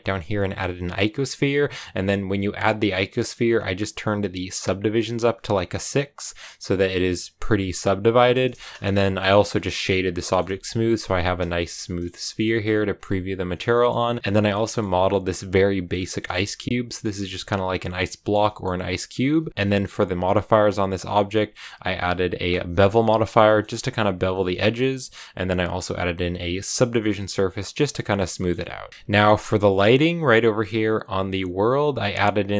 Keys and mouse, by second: 2.6 click, 4.5 click, 4.6 click, 6.5-8.0 drag, 8.6 x, 8.9 click, 9.0 shift+middle click, 9.2 middle click, 9.4 click, 10.3 Tab, 11.1 shift+middle click, 11.4 Tab, 11.7 middle click, 12.2 shift+middle click, 12.4 a, 14.2 shift+middle click, 14.5 middle click, 14.7 Tab, 15.0 middle click, 15.4 click, 16.2 shift+middle click, 16.4 middle click, 17.2 click, 17.5 middle click, 18.2 Tab, 18.3 middle click, 19.3 ctrl+space, 20.5 click, 22.5 click, 23.3 shift+click, 24.3 click, 27.8 click, 28.2 shift+click, 30.4 click.